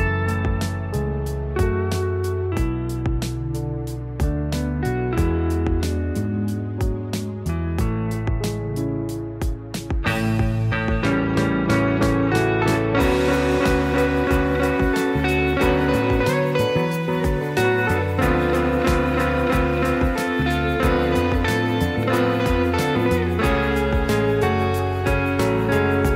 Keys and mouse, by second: 1.3 s, 1.9-2.2 middle drag, 2.8 click, 3.1 click, 3.8 middle click, 4.5 drag, 5.1 click, 5.7 Tab, 6.2 alt+z, 6.6 shift+middle click, 7.0 click, 7.6 g, 9.7 s, 12.0 middle click, 12.6 Tab, 13.1 alt+z, 13.6 s, 14.9-15.6 middle drag, 16.3-16.6 middle drag, 16.9 click, 18.4 click, 19.0 click, 19.8 click, 21.0-21.3 middle drag, 21.6-22.3 middle drag, 22.8 middle click, 23.0 shift+a, 24.3 click, 24.4 middle drag, 24.8 click, 25.3 s.